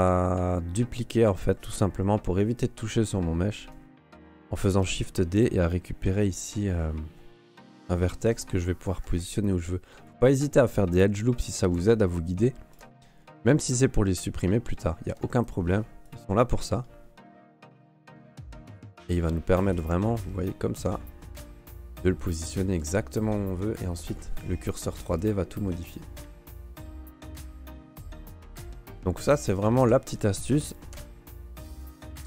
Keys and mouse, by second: 2.5 right click, 4.7 shift+d, 6.0 g, 8.3 g, 9.4 ctrl+r, 11.3 right click, 11.6 g, 13.6 alt+middle click, 13.9 alt+middle click, 14.5 alt+middle click, 15.4 ctrl+r, 16.6 middle click, 17.2 right click, 17.6 middle click, 18.3 g, 19.3 ctrl+r, 20.4 right click, 20.8 g, 22.3 alt+middle click, 22.6 alt+middle click, 25.1 click, 25.5 middle click, 25.8 Tab, 27.1 Tab, 29.2 middle click, 29.4 Tab, 29.8 ctrl+s, 30.9 alt+h, 31.4 right click, 31.8 click.